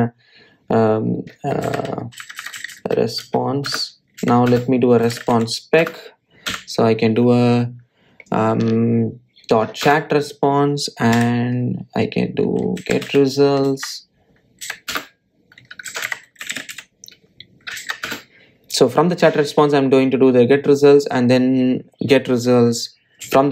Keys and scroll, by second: 0.4 alt+Return, 4.5 Return, 10.7 Return, 15.7 shift+Return, 18.8 shift+Return, 20.4 Return.